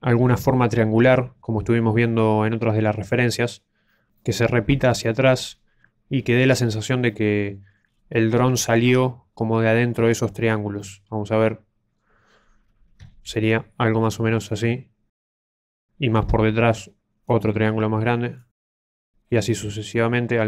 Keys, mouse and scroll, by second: 4.1 middle click, 7.0 middle click, 7.9-8.5 scroll up 2, 8.5 shift+middle click, 10.7 middle click, 13.2 ctrl+d, 13.4 ctrl+click, 14.4-15.1 ctrl+d, 15.1 ctrl+click, 15.3 ctrl+d, 15.3 ctrl+click, 15.6-16.1 ctrl+d, 16.1 ctrl+click, 17.2 ctrl+d, 17.4 ctrl+d, 17.4 ctrl+click, 18.3 ctrl+d, 18.5 ctrl+d, 18.5 ctrl+click, 18.9 ctrl+click, 19.5 ctrl+d, 19.6 ctrl+d, 19.6 ctrl+click.